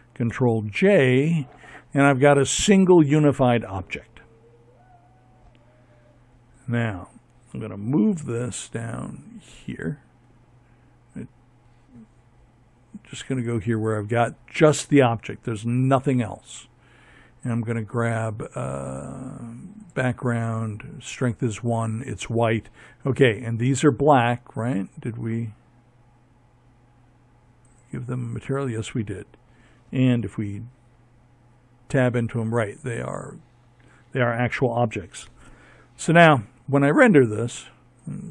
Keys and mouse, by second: 6.1 m, 11.2-13.5 drag, 25.5-28.0 drag, 28.1 Tab, 30.8 Tab, 35.9 click.